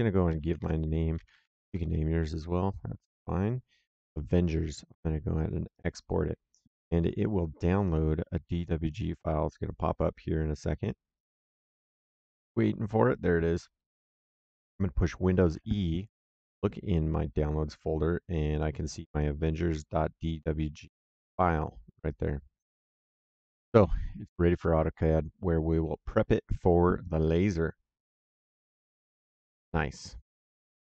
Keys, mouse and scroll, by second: 0.5-2.2 typing, 5.6 click, 15.3 super+e, 17.6 click, 21.3 click, 24.2 click.